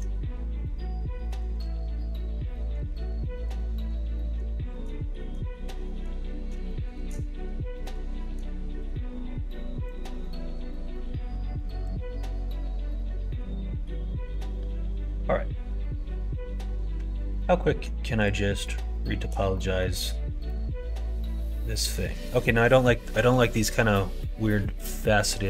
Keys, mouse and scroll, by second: 0.2 q, 1.2 middle click, 1.6 alt+z, 2.2 alt+z, 2.4 middle click, 3.2 middle click, 3.9 middle click, 4.5 shift+middle click, 5.1 middle click, 5.8 middle click, 6.6 shift+middle click, 7.7 middle click, 8.2 middle click, 9.8 click, 10.3 click, 11.6 middle click, 12.9 middle click, 16.9 Tab, 17.6 middle click, 18.6 middle click, 19.0 shift+middle click, 19.5 middle click, 20.4-21.9 middle drag, 22.7 middle click.